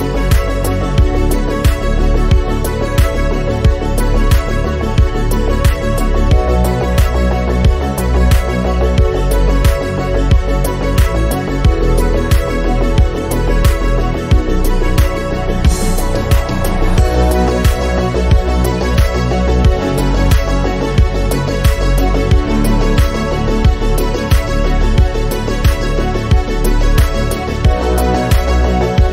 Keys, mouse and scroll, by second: 0.1 s, 4.0 shift+d, 5.7 r, 12.4-14.2 drag, 14.9 click, 15.3-16.6 drag, 18.3-19.9 drag, 21.6-23.1 drag, 25.7 scroll down 2.